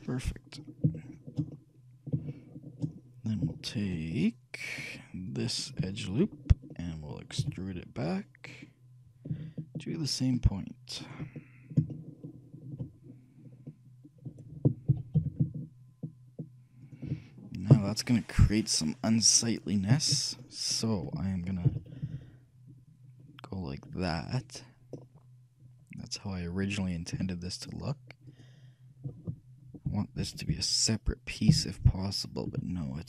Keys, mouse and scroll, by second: 0.2-5.4 middle drag, 5.4-6.5 shift+drag, 5.4-8.0 shift+right drag, 6.9 alt+click, 7.5 e, 7.8-8.8 middle drag, 11.5-15.7 middle drag, 15.0 shift+g, 21.8 g, 27.3 a, 28.4-30.4 right drag, 30.1 ;, 30.4 ;, 30.6 ;, 31.9 l, 32.6 a.